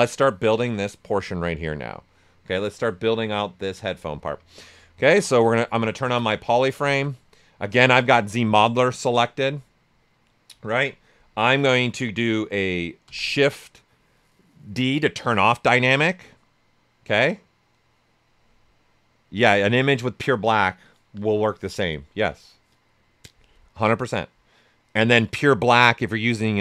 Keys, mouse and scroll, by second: 1.6 click, 2.0 right click, 4.2 right click, 5.0 shift+f, 5.2 right click, 5.9 ctrl+right click, 6.1 typing, 13.0 shift+d.